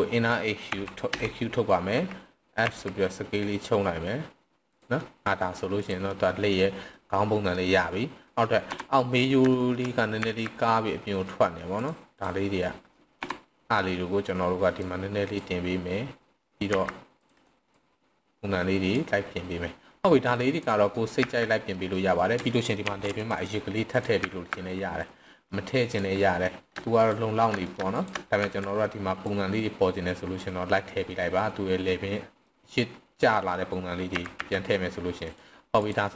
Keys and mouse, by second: 0.7 e, 1.1 Escape, 2.6 s, 4.7 drag, 5.0-5.6 middle drag, 5.7 click, 6.1-6.5 middle drag, 6.9-7.6 middle drag, 8.6 KP_3, 9.5 shift+middle drag, 10.2 z, 11.2 middle click, 11.7 click, 12.1 click, 13.0 KP_3, 14.9 click, 16.6 c, 17.3 right click, 17.7-18.9 drag, 20.1-20.4 middle drag, 20.5 click, 21.0 middle click, 21.2 z, 21.6 middle click, 22.7 ctrl+r, 23.4 drag, 23.9 click, 24.2 z, 25.2 middle click, 25.7 click, 26.2 middle click, 26.9 shift+click, 27.6 middle click, 27.9 shift+click, 28.4 z, 29.2-30.4 drag, 31.1-31.9 middle drag, 32.4 middle click, 33.2 middle click, 34.1 s, 34.4 x, 35.2 click, 35.8 drag.